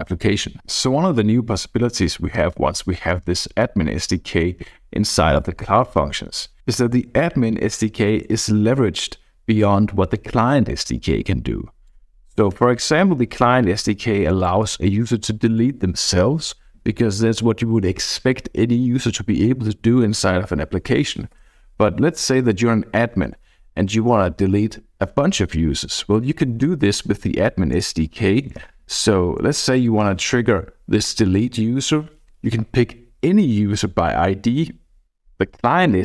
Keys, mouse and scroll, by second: 11.8-14.8 drag, 21.1 BackSpace, 21.3 BackSpace, 25.9-30.3 typing, 27.8 Return, 31.0 Down.